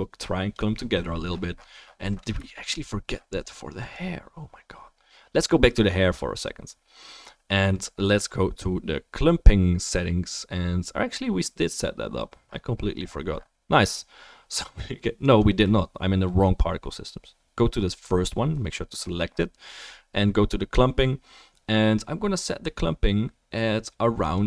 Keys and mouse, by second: 6.4-12.4 drag, 12.4-24.3 right drag, 24.3-24.4 middle drag.